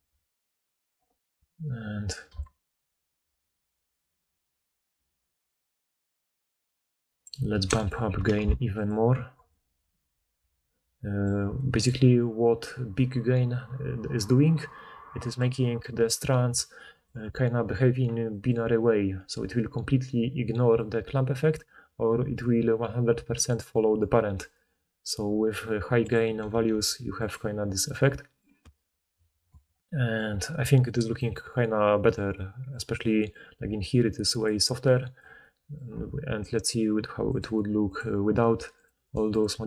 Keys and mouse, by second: 0.7-9.4 middle drag, 8.3 1, 9.4-11.0 right drag, 16.5-17.0 d, 18.3-21.5 right drag, 19.2-23.9 d, 20.7 click, 20.7 middle click, 24.3-28.4 drag, 24.3-27.3 middle drag, 24.3-27.3 right drag, 24.3 d, 24.4-25.2 d, 28.4-33.7 right drag, 33.6 d, 33.7-37.4 middle drag, 34.4 d, 34.6 d, 35.2 d, 37.4-38.8 right drag, 38.8 middle click, 39.1 right click, 39.3 middle click.